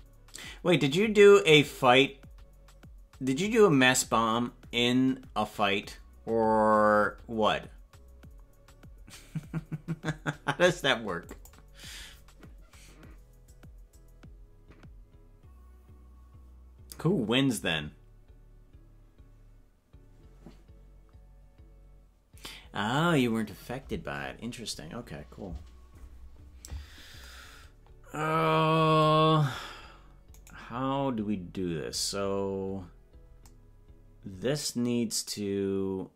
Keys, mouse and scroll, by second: 30.7-33.5 right drag.